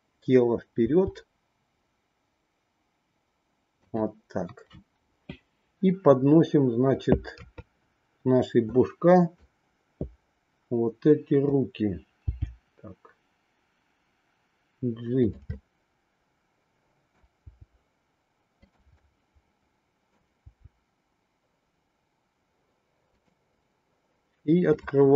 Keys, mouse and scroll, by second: 1.2 r, 7.3 KP_3, 8.8 click, 12.3 g, 15.8-17.2 middle drag, 17.4 g, 19.1-20.2 middle drag, 20.2-23.3 scroll down 1, 23.3 scroll down 1, 24.7-25.1 drag.